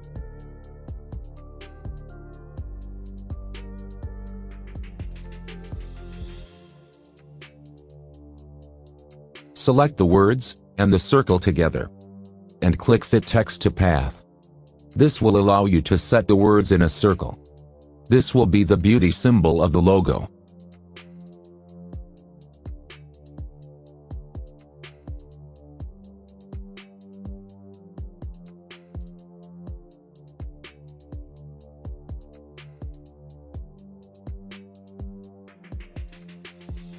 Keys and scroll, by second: 27.9 s, 28.1 p, 29.0 s, 29.2 space.